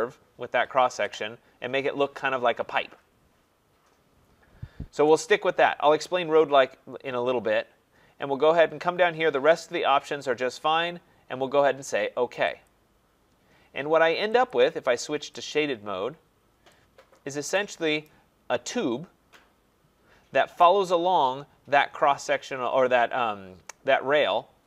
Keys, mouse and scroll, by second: 12.6 click, 14.5 click, 16.2 middle click, 20.6 right click.